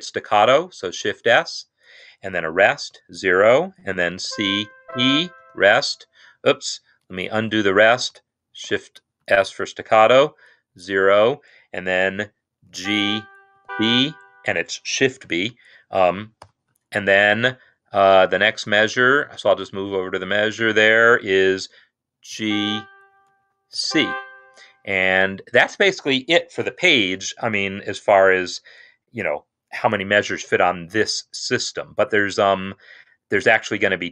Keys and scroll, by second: 0.4 shift+s, 2.7 0, 4.1-5.3 typing, 7.3 ctrl+z, 8.5 shift+s, 10.5-11.2 typing, 12.5-13.8 typing, 15.3-16.3 typing, 18.0 Right, 19.3 Right, 22.2 g, 23.6 shift+c, 25.6 Escape.